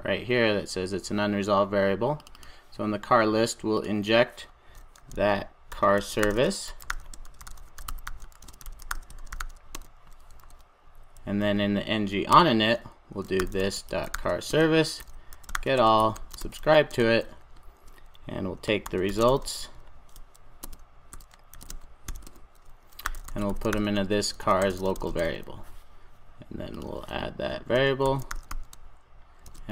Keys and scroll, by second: 9.7 Return, 10.3 super+s, 14.6 Return, 27.8 Tab.